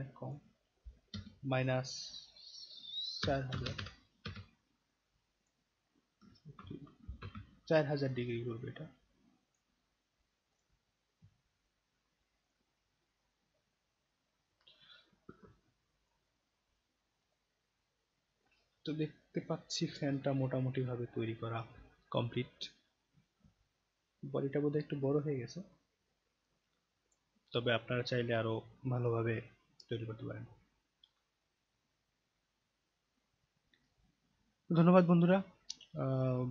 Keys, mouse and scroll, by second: 0.2 click, 5.4 click, 6.6 shift+e, 8.7-9.5 drag, 10.5 click, 12.4 click, 15.5-16.0 alt+drag, 16.2-16.7 alt+right drag, 17.1 alt+right click, 17.4 alt+middle click, 17.8-18.4 alt+right drag, 18.8-19.2 alt+right drag, 19.4 alt+click, 23.6-27.1 alt+drag.